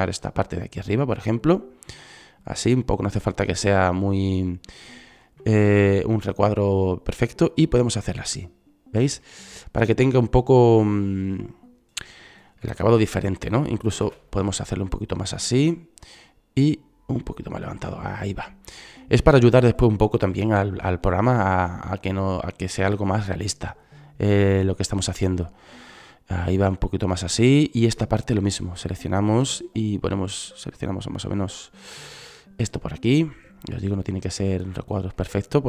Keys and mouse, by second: 4.8-8.4 drag, 11.6 click, 13.5 click, 13.6 c, 16.3 click, 20.9 c, 24.2 middle click, 25.2 click, 26.4 middle click, 27.1-30.3 drag, 29.2 c, 33.2-34.9 drag, 35.1-35.6 drag.